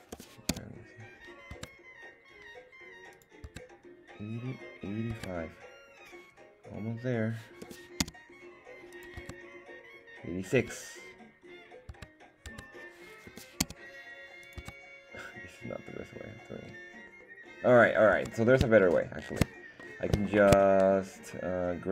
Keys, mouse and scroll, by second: 0.1 g, 0.5 z, 1.5 Tab, 3.1 click, 3.4 Tab, 5.1 Tab, 7.6 g, 8.0 z, 8.9 click, 9.2 Tab, 10.6 Tab, 11.9 Tab, 12.5 Tab, 13.3 g, 13.6 z, 14.4 click, 14.6 Tab, 18.1 Tab, 18.8 shift+middle click, 20.0 middle click, 20.3 shift+middle click, 20.7 middle click, 21.3-21.9 scroll up 2.